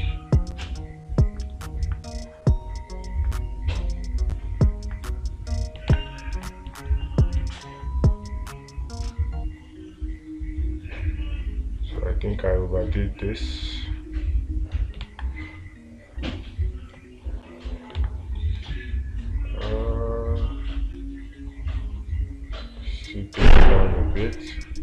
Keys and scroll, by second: 6.4 space, 15.5 space.